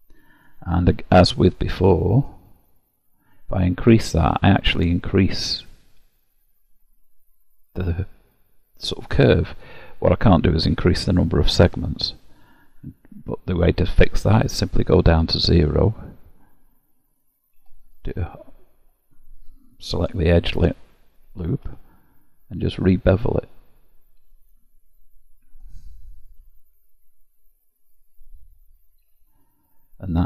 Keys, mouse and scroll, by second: 1.5 middle click, 2.1-3.3 scroll down 2, 3.3 click, 12.5 click, 15.2 click, 17.6 2, 18.1 alt+click, 21.5 ctrl+b.